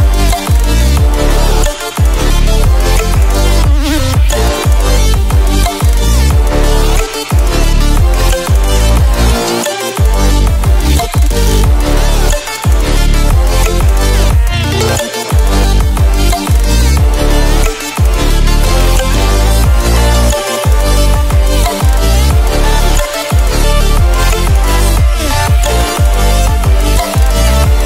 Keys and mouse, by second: 0.9-1.7 typing, 3.9 right click, 5.5-6.7 drag, 12.3 right click, 14.2 click, 17.7 ctrl+z, 18.3-20.4 typing, 24.6 alt+click, 26.1 [, 26.3 [, 27.2 ], 27.7 click.